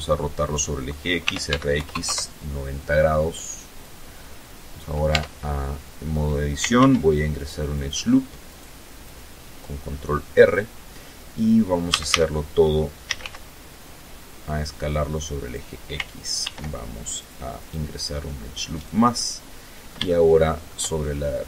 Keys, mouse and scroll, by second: 0.2 x, 0.4 KP_9, 0.5 KP_0, 0.8 KP_Enter, 2.5-3.6 drag, 3.8 Tab, 5.4 ctrl+r, 6.0 ctrl+click, 7.2 right click, 7.7-9.3 drag, 10.6 a, 11.7 s, 11.9 x, 14.1 click, 15.1 ctrl+r, 15.8 click, 16.2 click, 17.4 right click, 17.8-19.5 middle drag, 19.6 shift+middle click, 20.8 scroll up 2.